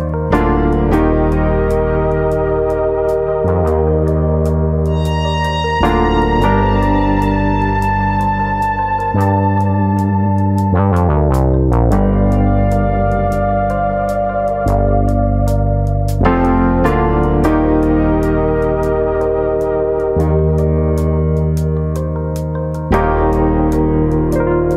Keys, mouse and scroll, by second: 0.8 alt+click, 1.3 click, 3.3 alt+click, 3.8 click, 5.2 alt+click, 6.0 click, 6.5 click, 8.6 click, 10.2 click, 10.2-10.6 scroll down 1, 10.6 middle click, 11.3 shift+middle click, 11.6 middle click, 12.6-13.0 scroll down 3, 13.1 shift+middle click, 13.5 middle click, 14.2 shift+middle click, 14.4 middle click, 15.1 scroll up 1, 15.5 click, 15.8 middle click, 17.0 click, 17.7 middle click, 18.9 click, 19.2 middle click, 19.6 middle click, 20.9 click, 20.9 middle click, 21.2 scroll up 2, 21.4 shift+middle click, 21.6 shift+middle click, 22.2 Tab, 22.5 middle click, 23.1 Tab, 23.5 middle click, 23.5 scroll up 1, 23.8 shift+middle click.